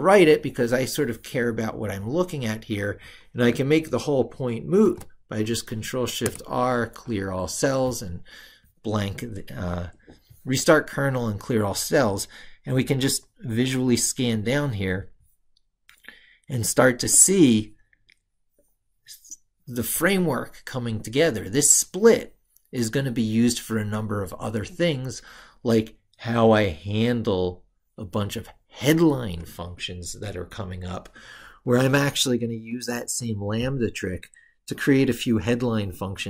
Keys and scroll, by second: 4.6 ctrl+shift+r.